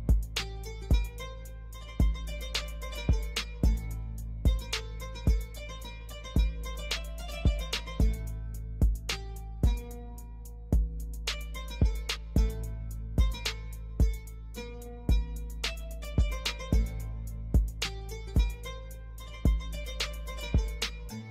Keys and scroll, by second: 5.7 F4, 10.3 5, 10.7 Return, 12.3 shift+F2, 13.6 ctrl+q, 15.3 ctrl+u, 15.7 Escape, 16.3 F2.